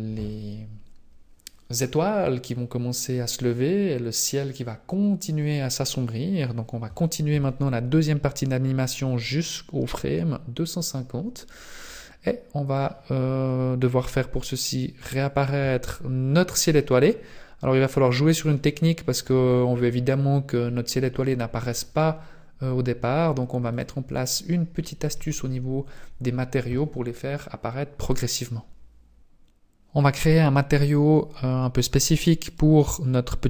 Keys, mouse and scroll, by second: 11.5-11.9 scroll down 2, 11.9 middle click, 15.3 shift+click, 18.5 click, 23.9 click, 31.5-32.5 scroll down 2, 32.5 right click.